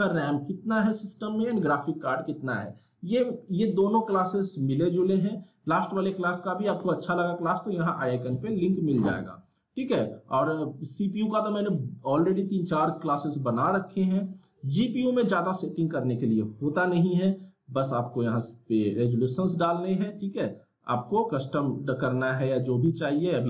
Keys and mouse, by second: 9.4 click, 15.4 click, 18.4 click.